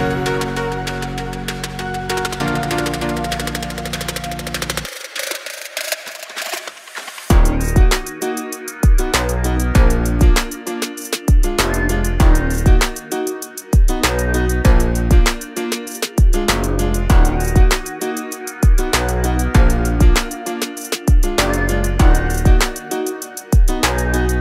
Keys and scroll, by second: 0.4-3.3 typing, 1.4 Return, 3.6 Return, 4.4 space, 7.1 e, 13.0 space, 13.1 Escape, 22.5 r, 23.9 space.